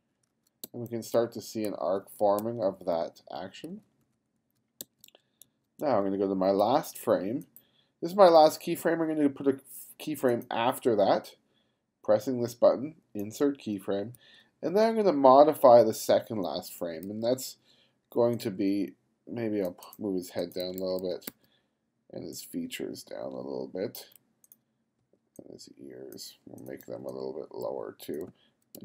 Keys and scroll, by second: 0.7 g, 1.7 f, 2.4 g, 3.7 f, 4.8 g, 14.2 f, 17.1 b, 20.6 b, 25.0 b, 27.4-28.8 typing.